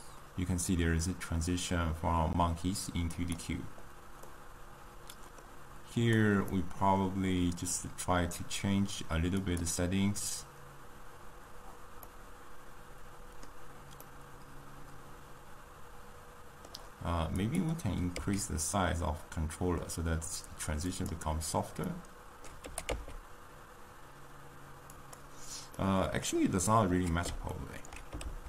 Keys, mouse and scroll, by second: 4.3-6.0 middle drag, 6.0 drag, 6.5-9.5 middle drag, 9.5 click, 14.0-17.1 middle drag, 17.4 click, 18.6 s, 22.0-23.1 middle drag, 23.1 g, 25.9-28.4 middle drag.